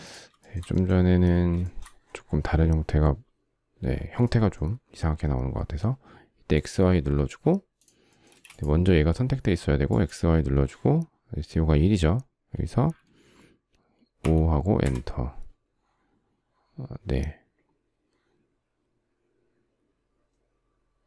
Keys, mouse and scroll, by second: 0.0 shift+middle click, 0.1 shift+double middle click, 1.2 shift+double middle click, 7.9 space, 13.8 5, 14.5 Return.